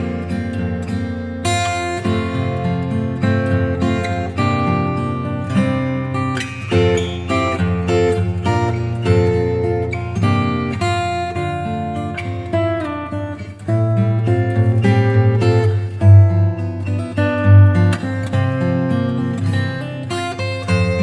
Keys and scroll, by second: 2.1 [, 5.4 x, 7.6 [, 8.9 [, 11.0 [, 18.0 v.